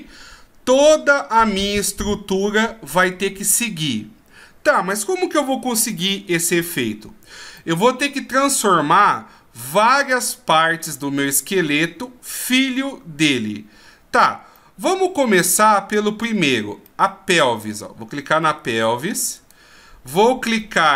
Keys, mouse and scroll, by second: 7.6 middle click, 14.5 middle click, 16.8 middle click, 19.3 right click.